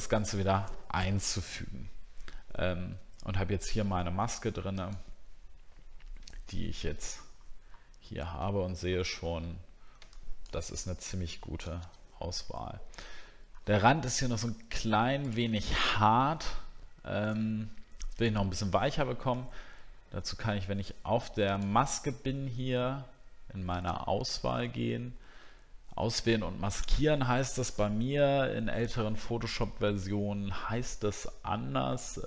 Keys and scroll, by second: 7.0 alt+scroll up 1, 7.6-8.6 alt+scroll up 2, 12.0 alt+scroll down 1, 13.2 alt+scroll up 1, 18.3 alt+scroll down 1, 20.3-21.3 alt+scroll down 1.